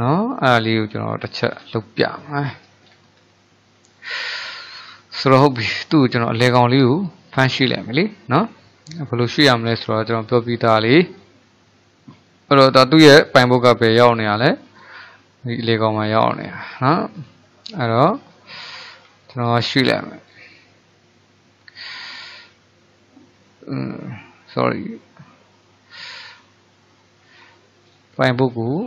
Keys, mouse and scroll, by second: 1.5-2.3 scroll down 4, 2.3 shift+middle click, 2.8-3.4 scroll up 4, 3.4-4.0 shift+middle drag, 4.0 click, 4.6 click, 5.3-8.4 shift+middle drag, 12.6 click, 13.3 click, 14.8-17.3 drag, 17.8 click, 19.0 shift+s, 23.3 shift+s, 27.9-28.8 drag.